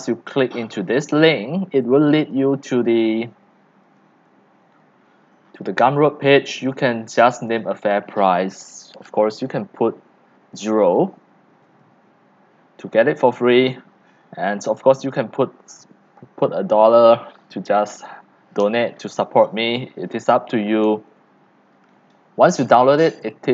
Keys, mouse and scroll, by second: 0.0 right click, 0.5 click, 1.0 middle click, 1.0 scroll, 2.0-2.5 drag, 4.5 drag, 4.8-6.7 middle drag, 4.8-5.9 scroll down 20, 5.9-6.7 scroll up 10, 6.7 scroll up 1, 6.7 click, 6.9-7.6 scroll down 2, 9.5-11.6 scroll down 2, 11.6 scroll down 1, 11.8 scroll up 2, 11.8-20.2 drag, 20.4 click, 20.8-21.4 scroll up 8, 21.4-21.9 scroll down 4, 21.9 scroll up 1, 22.1-23.2 scroll down 5, 23.2 scroll down 1, 23.3-23.5 drag.